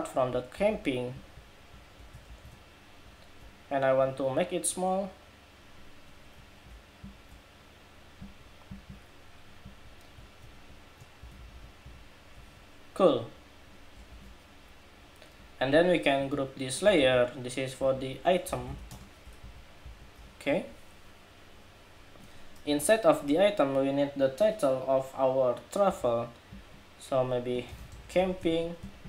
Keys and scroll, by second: 0.2 super+c, 0.8 super+c, 2.0 shift+super+v, 10.2 alt+shift+Right, 10.9 alt+Right, 11.1 alt+Right, 11.3 alt+Right, 11.6 alt+Right, 12.9 alt+Right, 13.8 super+=, 16.7 super+g.